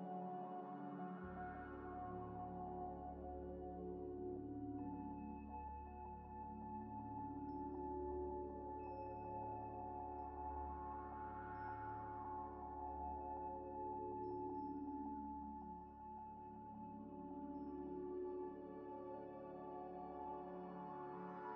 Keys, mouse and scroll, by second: 0.8 middle click, 1.3 scroll down 1, 1.9 scroll down 1, 1.9 scroll up 1, 2.1 z, 2.5 z, 5.3 shift+click, 6.1 shift+click, 6.7 scroll down 1, 8.1 shift+click, 9.3 shift+click, 9.4 shift+click, 10.9 Tab, 11.7 Tab, 12.0 a, 12.6 u, 15.0 scroll up 1, 15.2 scroll down 1, 15.8 scroll up 1, 15.9 scroll down 1, 17.5 Tab, 17.8 scroll, 18.5 middle click, 18.8 scroll up 1, 20.3 scroll down 1, 20.6 scroll up 1, 20.9 middle click, 20.9 middle click.